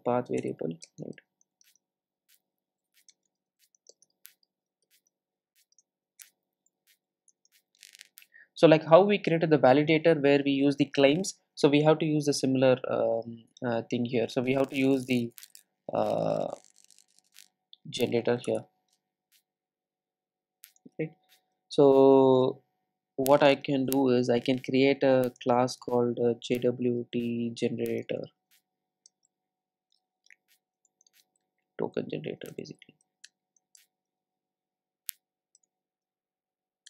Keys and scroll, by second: 0.5 Return.